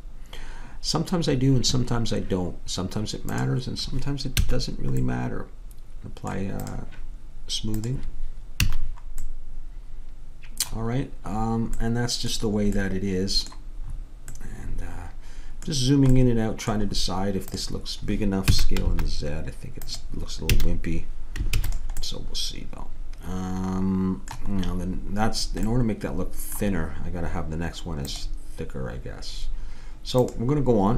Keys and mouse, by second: 0.5-2.5 drag, 3.3-5.2 drag, 4.4 a, 6.6-8.8 drag, 8.7 a, 17.5-19.5 drag, 18.5 s, 20.5 a, 21.6 ctrl+s.